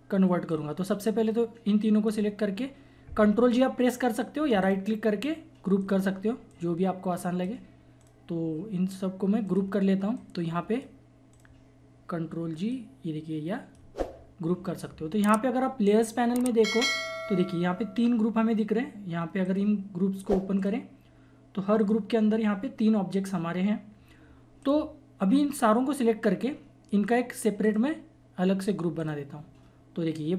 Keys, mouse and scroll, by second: 0.5 click, 0.7-4.6 drag, 4.6 right click, 5.8-8.0 drag, 8.0 right click, 9.4 click, 10.5 typing, 11.3 right click, 12.7-16.7 drag, 19.4 click, 24.6-27.6 drag, 26.9 typing, 27.6 right click, 29.0 click.